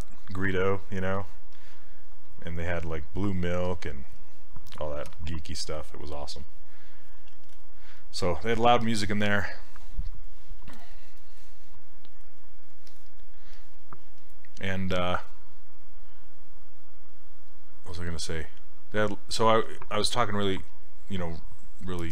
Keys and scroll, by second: 5.1 q.